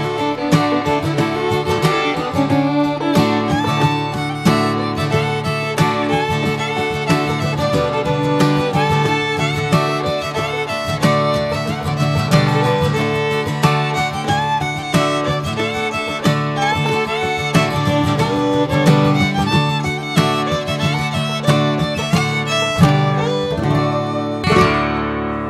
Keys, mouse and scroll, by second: 2.2 scroll up 1, 2.5 click, 3.5 click, 4.9 r, 6.2 click, 7.8 click, 8.5 click, 10.4 x, 12.6 Tab, 13.0 click, 13.6 click, 15.2 s, 16.8 click, 17.7 click, 19.6 shift+middle click, 19.9 s, 23.8 Tab, 24.2 scroll down 2, 24.7 drag.